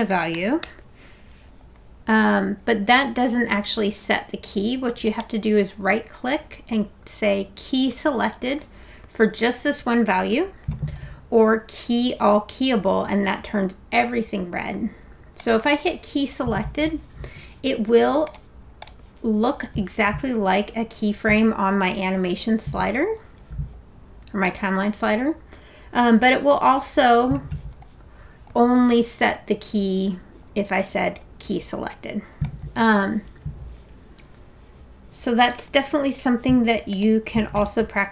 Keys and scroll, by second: 0.0-0.9 typing.